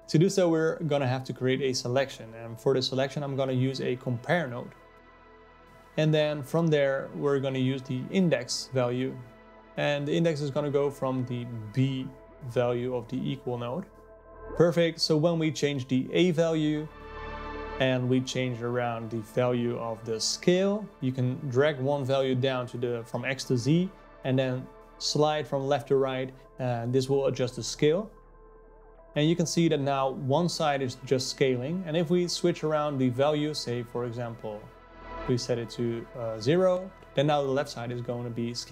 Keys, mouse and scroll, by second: 0.0-2.9 drag, 5.6 shift+a, 11.2 click, 15.7-25.2 drag, 28.2-32.8 drag, 35.8-38.7 drag.